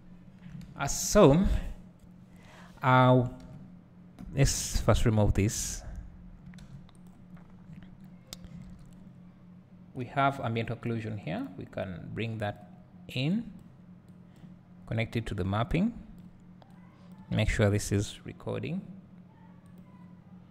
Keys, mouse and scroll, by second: 0.3-4.7 drag, 1.4-2.2 scroll up 2, 2.2 scroll up 1, 2.3-3.5 scroll down 2, 3.5-4.7 scroll down 1, 5.8-7.1 drag, 12.8 click, 13.3 click, 14.1 click, 16.2-20.5 drag.